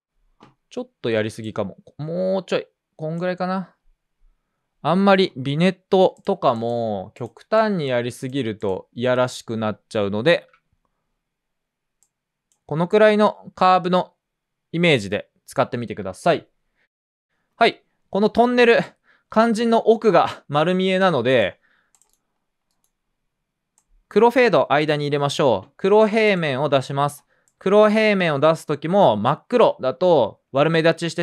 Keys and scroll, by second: 10.2 super+s.